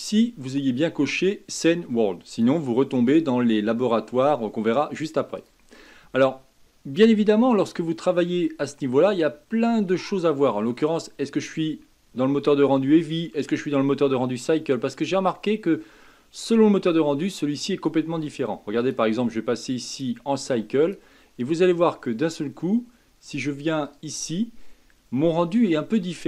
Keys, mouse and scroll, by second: 7.6-8.7 middle drag, 8.7-9.5 scroll up 3, 9.5 middle click, 10.3 scroll down 1, 10.4-11.2 scroll up 1, 11.2-14.2 scroll down 1, 18.8 click, 19.9-24.5 drag, 25.2 scroll up 1, 26.1 scroll up 1.